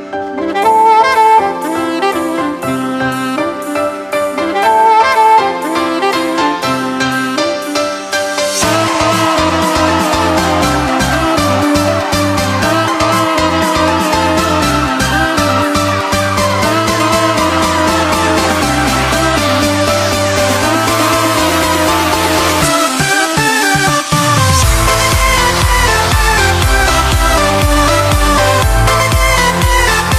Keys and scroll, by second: 14.6 x.